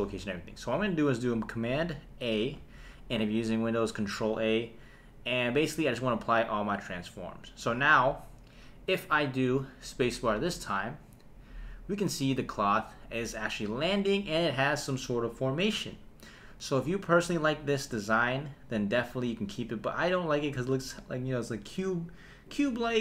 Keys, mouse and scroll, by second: 2.6 super+a, 7.6 n, 10.4 space, 13.7 space.